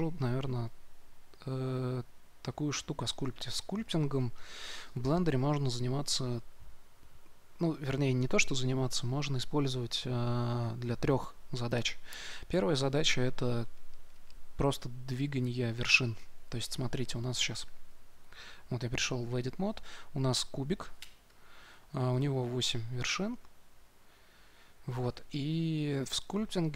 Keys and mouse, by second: 17.7 Tab.